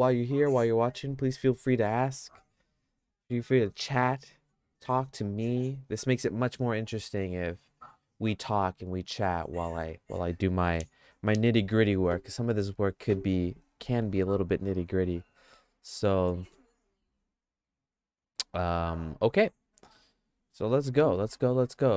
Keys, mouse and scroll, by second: 12.6-15.6 middle drag, 16.1 middle click, 16.5-20.0 shift+middle drag, 21.2 middle click, 21.8 middle click.